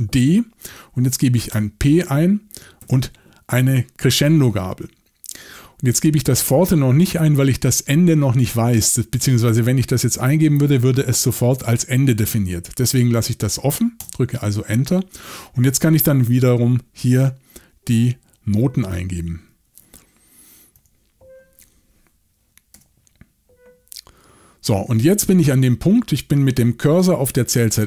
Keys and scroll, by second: 1.5 p, 2.8 shift+,, 14.0 Return, 20.8 ., 22.7 5.